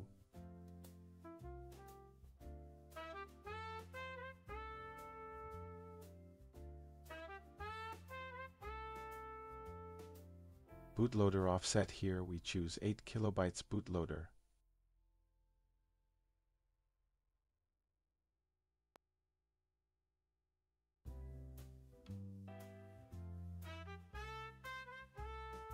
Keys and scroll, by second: 0.6 Return, 10.7 Down, 13.1 Return, 17.8 Return.